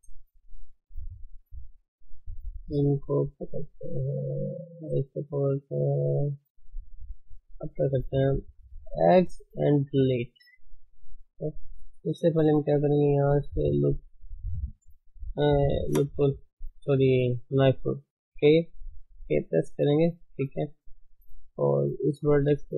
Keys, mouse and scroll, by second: 0.0-0.4 scroll down 5, 0.4 shift+z, 0.6 middle click, 1.0 middle click, 1.2-2.0 scroll up 2, 2.7 click, 3.4 click, 3.7-5.0 middle drag, 5.0 ctrl+click, 5.3-7.3 middle drag, 7.3 shift+z, 7.5-9.8 middle drag, 10.2-11.5 middle drag, 11.5 ctrl+z, 11.8-13.0 middle drag, 13.0 k, 16.5-20.2 middle drag, 20.2 ctrl+z, 21.2 k.